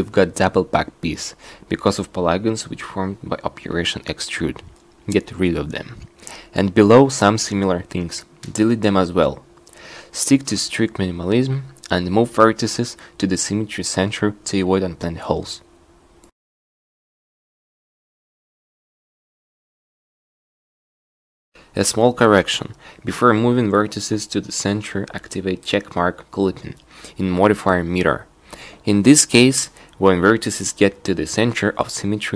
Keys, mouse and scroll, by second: 4.3 x, 7.6 z, 11.1 x, 26.4 n, 27.8 n.